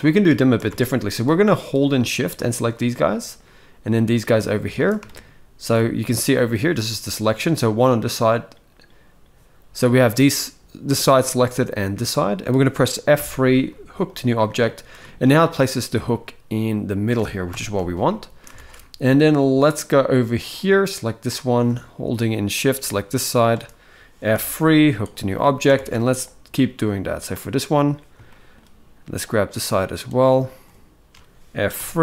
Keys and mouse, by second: 0.1 shift+middle click, 0.4 alt+a, 1.2 click, 2.6 shift+middle click, 3.6 shift+click, 4.8 shift+middle click, 6.7 shift+middle click, 12.9 F3, 14.4 shift+middle click, 14.7 middle click, 15.8 middle click, 17.2 KP_7, 17.8 shift+middle click, 18.2 alt+a, 20.4 click, 22.3 shift+click, 24.0 F3, 25.1 shift+middle click, 25.4 alt+a, 25.9-27.0 drag, 28.0 shift+middle click, 29.1-30.4 shift+drag, 31.5 F3.